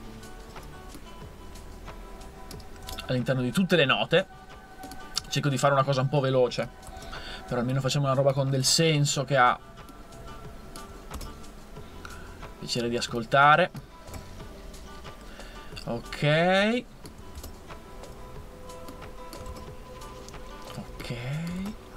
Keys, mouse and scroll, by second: 2.9 super+d, 6.9 super+c, 8.6 super+v, 11.2 super+v, 14.1 super+v, 17.4 super+v, 19.5 super+v, 21.6 super+v.